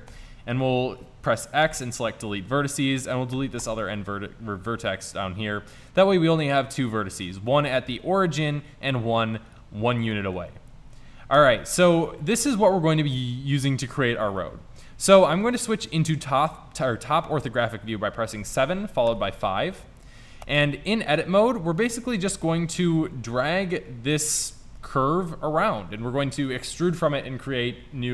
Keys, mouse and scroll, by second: 0.2 x, 3.0 right click, 3.4 x, 11.3 middle click, 11.4 Tab, 11.6-16.0 middle drag, 18.4 KP_7, 19.2 KP_5, 20.6 Tab.